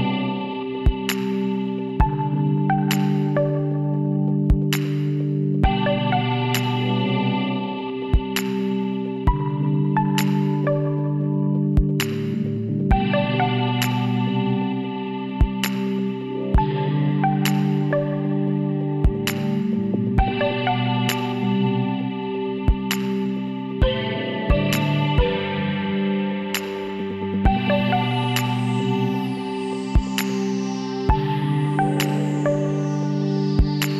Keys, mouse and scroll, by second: 1.7 ctrl+z, 2.3 ctrl+z, 4.1-5.8 middle drag, 5.4 c, 19.0-21.4 middle drag, 22.0-23.5 middle drag, 25.6 c.